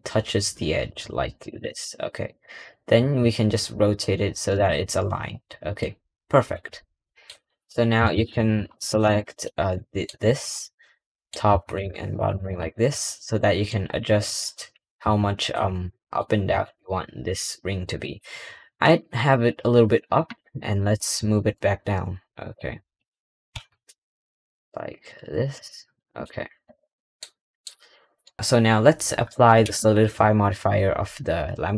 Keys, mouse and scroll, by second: 5.3-5.8 middle drag, 6.9 middle click, 7.6 scroll up 4, 7.8 3, 8.8 alt+click, 9.6-12.2 middle drag, 12.2 alt+shift+click, 12.6-13.6 middle drag, 13.6 scroll down 1, 13.8-14.2 middle drag, 15.7-16.3 middle drag, 22.9 click, 25.9 middle drag, 26.1 scroll down 1, 26.6 click, 26.8-27.2 middle drag, 27.4 middle drag.